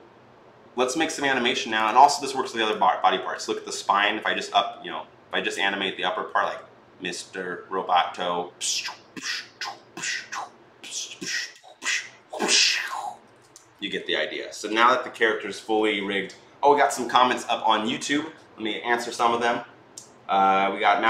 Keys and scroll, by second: 13.1 ctrl+z.